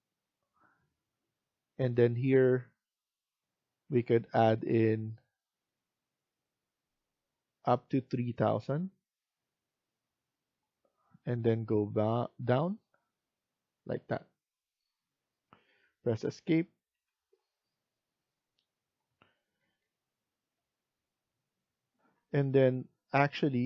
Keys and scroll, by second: 16.8 Escape, 21.9 F1.